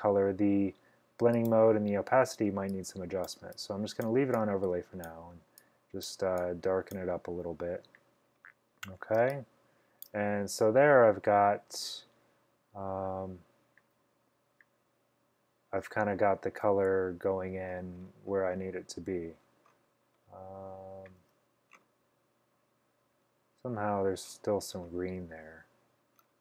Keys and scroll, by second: 9.3-10.1 typing.